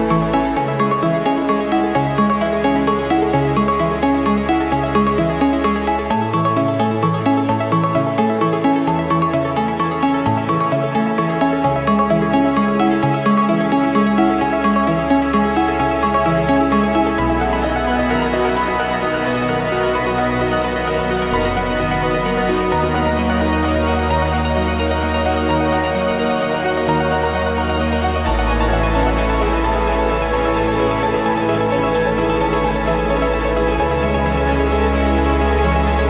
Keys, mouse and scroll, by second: 0.3 scroll up 1, 0.9 scroll down 2, 2.7 ctrl+click, 3.4 ctrl+click, 4.6 click, 5.7-8.4 drag, 9.2 click, 11.9 click, 12.8 space, 14.7 click, 15.9 click, 17.0-19.0 drag, 21.2 click, 24.8 click, 26.3 click, 27.1 click, 27.9 1, 28.4 5, 29.3 click, 30.0 1, 30.6 5, 31.2 click, 32.5 8, 32.8 0, 33.4 click, 34.3 1, 34.6 2, 35.2 scroll down 1, 35.8 scroll up 1.